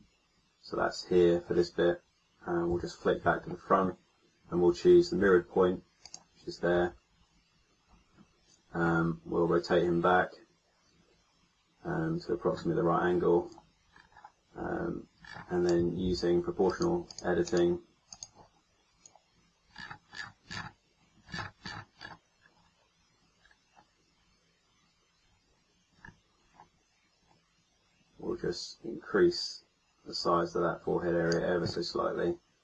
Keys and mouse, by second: 2.6 KP_1, 16.0 ctrl+z.